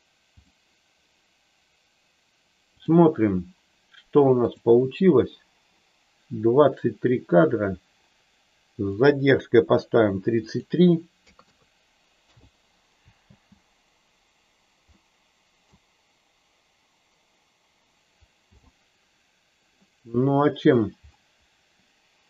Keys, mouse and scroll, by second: 2.6 click, 8.9 click, 10.5-12.4 drag, 11.4 KP_3, 13.2 space, 14.9 middle click, 18.4 n, 19.8 middle click.